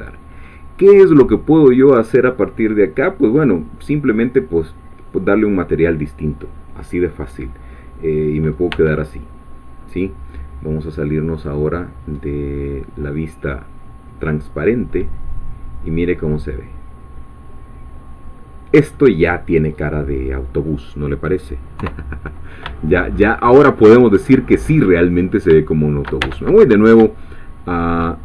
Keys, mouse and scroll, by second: 0.4-1.0 scroll up 2, 1.0-3.3 scroll down 2, 3.3-3.8 scroll up 2, 3.8-4.4 scroll down 2, 4.4-5.8 middle drag, 7.7 scroll down 2, 8.4 scroll up 2, 8.7 Tab, 9.2-9.8 scroll down 1, 9.8-10.4 scroll up 1, 11.4 click, 12.2-12.9 scroll down 1, 14.7-19.1 middle drag, 19.2-21.2 scroll down 1, 21.2-21.8 scroll down 1, 21.8 3, 22.8 shift+middle click, 23.7-24.0 shift+scroll up 2, 25.7 shift+middle click, 26.2 Tab, 26.6-27.0 shift+scroll up 1, 27.2-28.2 shift+middle drag.